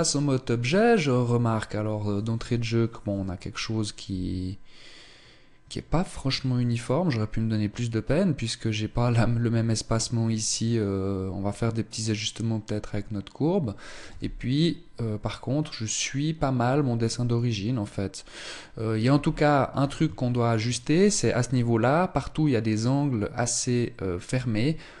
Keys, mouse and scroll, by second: 12.5-13.6 scroll down 1, 13.6 z, 18.3 scroll up 3, 18.5 z, 19.7 shift+middle click, 24.3-25.0 scroll down 3.